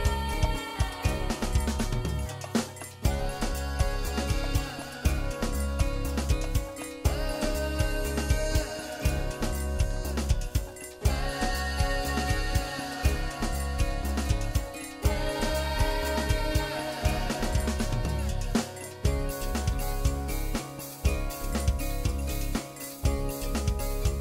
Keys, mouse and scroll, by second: 1.7 e, 5.2 click, 5.4 middle click, 6.9 scroll up 5, 7.2 shift+middle click, 7.8 middle click, 11.1 Tab, 11.3 middle click, 13.4 Tab, 13.7 middle click, 14.6 click, 14.9 middle click, 16.0 click, 16.7 shift+click, 17.3 click, 17.9 shift+click, 18.1 shift+click, 18.6 shift+click, 18.8 middle click, 20.2 KP_1, 21.6 g, 23.4 click, 23.7 middle click.